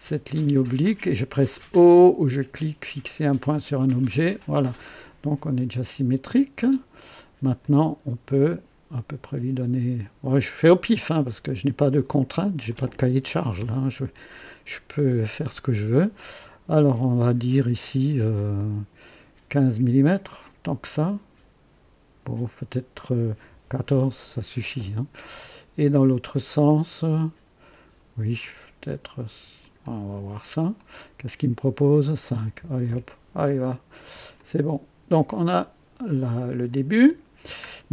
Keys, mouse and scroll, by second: 3.9 o, 7.6-10.9 drag, 12.0 click, 14.8 click, 23.3 KP_1, 23.6 KP_4, 23.9 KP_Enter, 26.6 click, 28.4 click, 29.6 click, 30.8 click, 32.6 KP_5, 32.8 Return, 34.3 click, 35.3 click, 35.3 typing, 36.7 click, 36.9 typing.